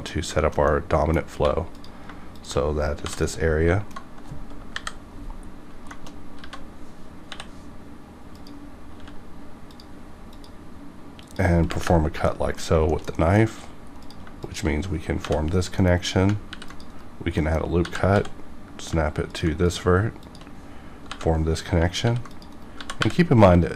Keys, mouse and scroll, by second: 0.4 shift+middle click, 0.4 shift+middle click, 0.7 middle click, 1.3 1, 1.7 click, 2.3 shift+click, 3.2-4.6 middle drag, 4.6 KP_5, 5.4 scroll up 1, 6.0 shift+middle click, 6.2 scroll up 1, 6.6 alt+a, 7.3 k, 8.3 click, 9.0 c, 9.7 click, 11.2 click, 11.6 KP_Enter, 12.3 middle click, 12.9 shift+middle click, 13.1 middle click, 14.0 click, 14.2 click, 14.4 shift+click, 15.2 j, 15.4-16.0 scroll down 2, 15.8 middle click, 16.5 ctrl+r, 16.6 ctrl+click, 16.9 right click, 17.4 middle click, 17.8 g, 18.1 x, 19.3 ctrl+click, 19.7 click, 20.2 shift+click, 20.7 scroll up 1, 21.6 scroll down 1, 22.0 ctrl+r, 22.3 ctrl+click, 22.5 right click, 22.8 g, 23.0 y.